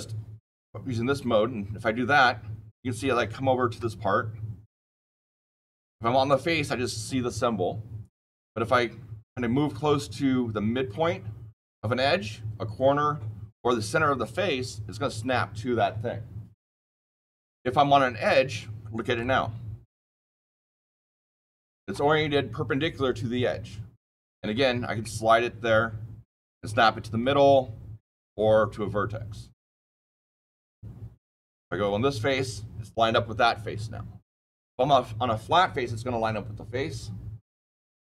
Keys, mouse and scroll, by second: 3.1-3.7 shift+middle click, 3.5 shift+middle click, 3.9-7.3 scroll down 6, 19.2-19.8 shift+middle click, 19.6 shift+middle click.